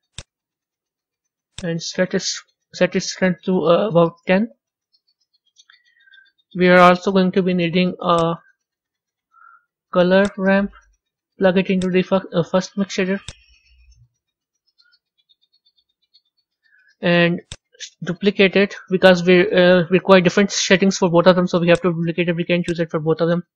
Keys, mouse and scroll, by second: 1.5-4.5 drag, 12.3 click, 14.3 click, 17.4 click, 18.6 shift+d, 23.4 click.